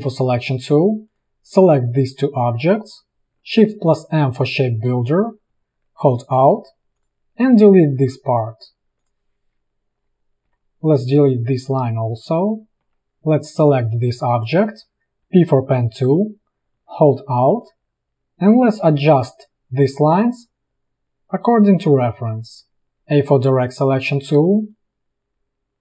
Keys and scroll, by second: 4.2 shift+m, 8.1 v, 10.5 Delete, 12.9 a, 13.1 v, 15.3 p, 23.0 a.